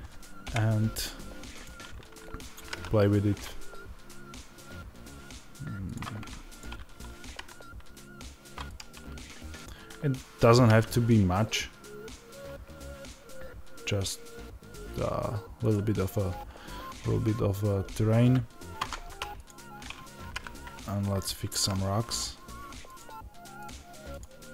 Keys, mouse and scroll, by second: 0.3 KP_0, 1.5 click.